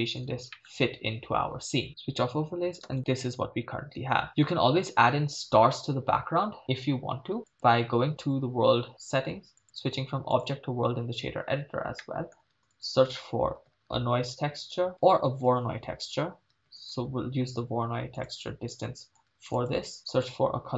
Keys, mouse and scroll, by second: 0.5 ctrl+middle click, 1.9 click, 2.9 shift+space, 4.3 shift+space, 7.5 click, 9.6-10.4 drag, 12.0-12.3 middle drag, 12.5 shift+a, 15.6 BackSpace, 15.8 BackSpace, 16.0 BackSpace, 19.5 shift+a.